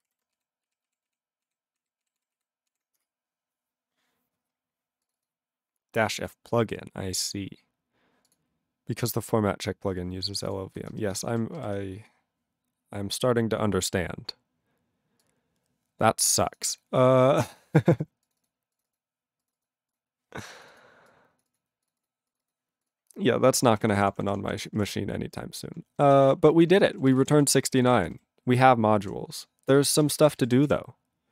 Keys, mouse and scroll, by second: 0.4 s, 3.0 Return, 4.6-5.0 scroll, 5.0 click, 5.1 click, 8.3 click, 9.7 scroll, 10.5 click, 11.0 ctrl+space, 11.3 ctrl+alt+b, 11.6 ctrl+g, 15.2 click, 16.4 click, 16.5 click, 17.1-18.2 scroll, 18.2 click, 18.4 click, 18.8 click, 19.4 click, 19.5 click, 19.9 click, 20.6 click, 20.6 click, 20.7 click, 21.1 click, 21.5 click, 21.8 click, 22.0 click, 22.3 click, 22.4 click, 23.6 ctrl+a, 23.7 ctrl+p, 23.8 ctrl+p, 23.9 ctrl+p, 24.0 ctrl+p, 24.2 ctrl+p, 24.9 Return, 26.0 ctrl+n, 26.1 ctrl+n, 26.2 ctrl+n, 26.4 ctrl+p, 26.5 ctrl+e, 26.7 ctrl+space, 26.8 ctrl+a, 26.9 ctrl+p, 27.1 ctrl+g, 27.1 ctrl+e, 27.2 ctrl+n, 27.3 ctrl+n, 27.5 ctrl+space, 27.5 ctrl+a, 27.6 ctrl+p, 27.7 ctrl+p, 27.8 ctrl+g, 27.8 ctrl+e, 28.0 ctrl+n, 28.1 ctrl+n.